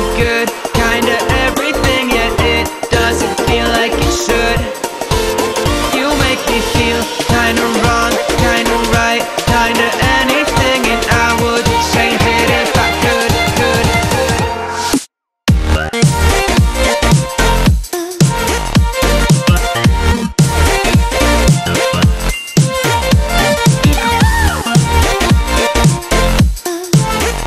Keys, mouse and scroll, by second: 2.4-3.1 space, 3.2 click, 6.2 right click, 7.2 click, 9.3 ctrl+click, 10.4 click, 13.2 ctrl+a, 14.3 click, 18.6 click, 21.1 right click, 22.6 click.